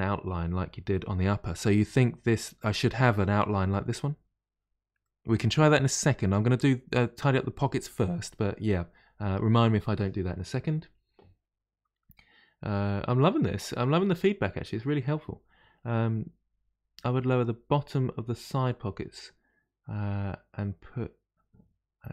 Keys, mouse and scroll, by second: 5.0-8.0 middle drag.